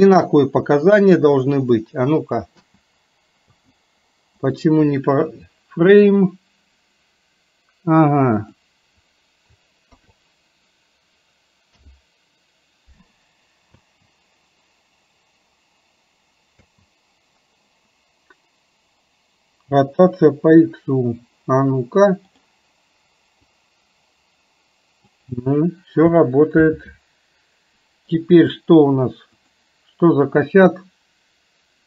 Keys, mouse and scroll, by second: 2.6 space, 3.5 space, 4.5-11.9 drag, 13.8 space, 16.6 space, 22.3 click, 23.6-25.2 drag, 26.7 ctrl+z, 29.3-31.8 drag.